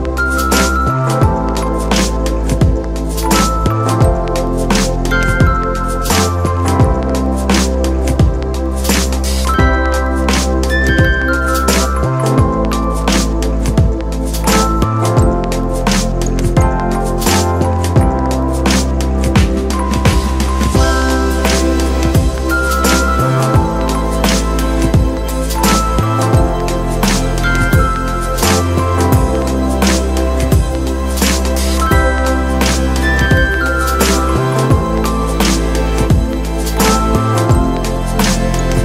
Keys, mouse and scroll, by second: 0.2 1, 0.9 x, 2.1-3.3 middle drag, 3.3 KP_1, 4.3 Tab, 4.9 KP_Divide, 5.3 KP_1, 6.4 ctrl+1, 7.5-7.9 scroll down 2, 7.9 shift+middle click, 8.4-10.2 scroll up 2, 10.2 click, 11.8-12.2 scroll up 2, 12.2 Tab, 13.1 click, 14.6 s, 16.2 g, 17.4 scroll down 2, 17.7 KP_3, 18.4-19.2 scroll up 1, 19.5 click, 21.1-22.9 scroll down 1, 22.9 2, 23.5 click, 24.5 click, 26.3 drag, 27.7 click, 28.9 drag, 29.6-30.7 shift+middle drag, 30.7 s, 32.3 click, 33.8 KP_1, 36.1 g, 38.0 scroll down 2, 38.3 Tab.